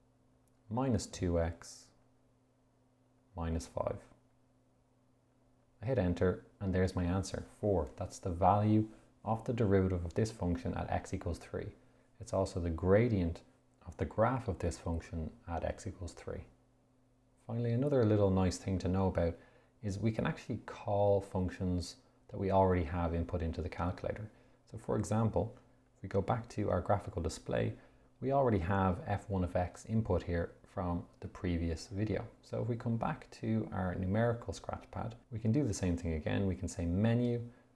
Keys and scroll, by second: 0.8 2, 2.1 x, 3.5 -, 4.6 5, 5.7 Return, 37.1 Menu.